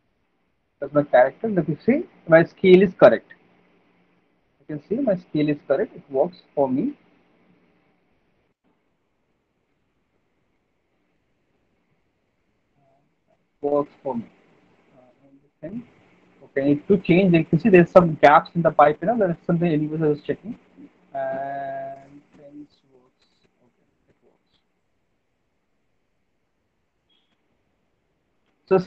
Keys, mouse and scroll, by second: 1.7 alt+click, 4.2 typing, 10.0 w, 11.1 w.